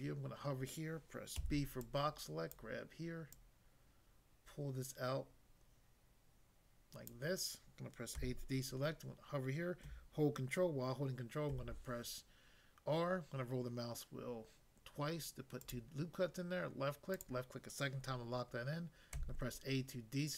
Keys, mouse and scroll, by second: 1.3 b, 1.8 click, 2.5 click, 3.4 click, 7.1 click, 8.1 a, 11.5 ctrl+r, 13.4-14.1 scroll up 1, 15.7 click, 17.2 click, 19.1 a.